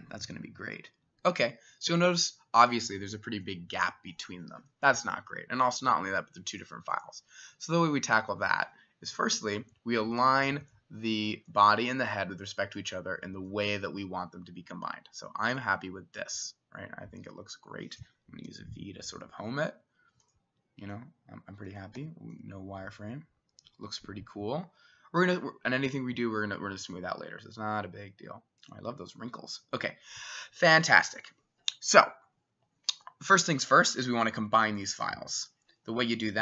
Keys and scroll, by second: 18.5 v, 22.0 w.